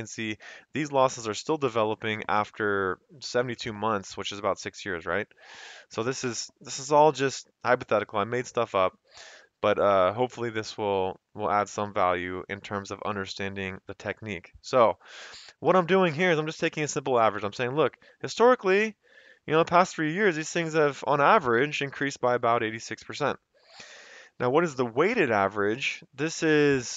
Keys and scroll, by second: 15.7 F2, 17.0 Escape, 18.2 F2, 19.7 Escape, 24.3 Down, 25.2 F2, 26.5 Escape.